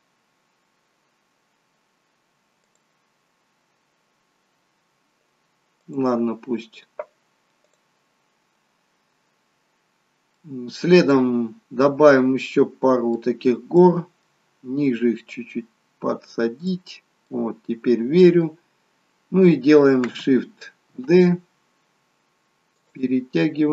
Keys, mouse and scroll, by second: 9.3-9.8 scroll down 1, 9.8 scroll up 3, 11.1 middle click, 11.1-12.1 scroll down 6, 12.1 middle click, 13.7 middle click, 15.3 click, 17.2 middle click, 18.7-19.1 scroll down 5, 21.2 shift+d.